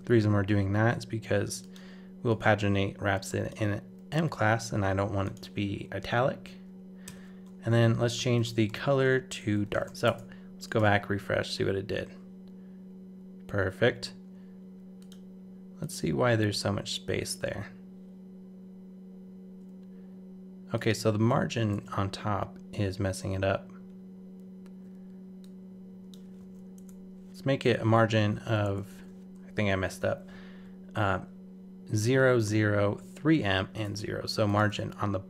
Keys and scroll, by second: 10.0 super+Tab, 10.8 super+r, 21.7 super+Tab, 26.4 super+c, 33.6 super+s, 33.8 super+Tab, 34.7 super+r.